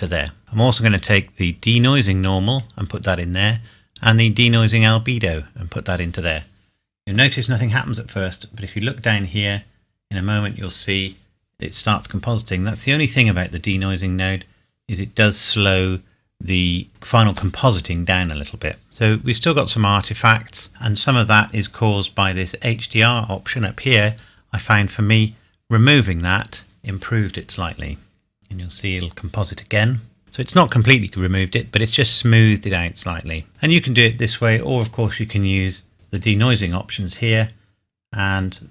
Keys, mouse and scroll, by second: 0.8 click, 18.8 scroll up 1, 19.2 scroll down 1, 21.1-23.0 scroll up 1, 25.0-26.2 scroll up 1, 26.2 click, 31.2 scroll up 1, 32.7 scroll down 1, 35.9 scroll up 1, 36.1 click.